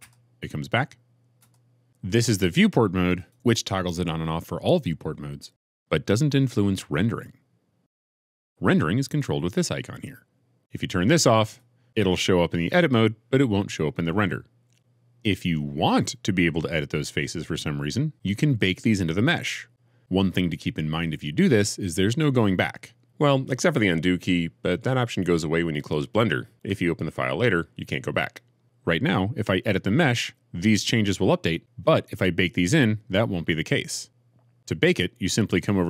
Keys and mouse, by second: 1.3 Tab, 3.1 click, 7.0 Tab, 7.8 Tab, 8.4 click.